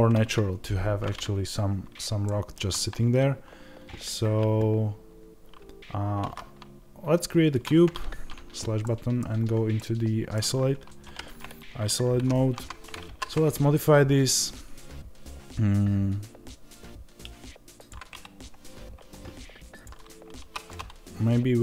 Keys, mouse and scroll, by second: 7.6 middle click, 8.3 KP_Divide, 9.1 scroll down 1, 9.6-17.7 middle drag, 10.9 alt+g, 17.7 click, 20.3 3, 20.6-21.6 middle drag.